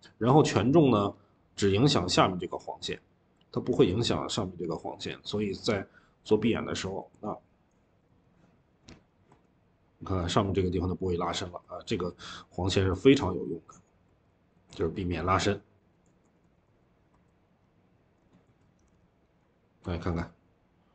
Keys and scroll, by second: 14.6-15.0 typing, 16.7-17.5 typing, 18.6 Escape, 18.8 Escape.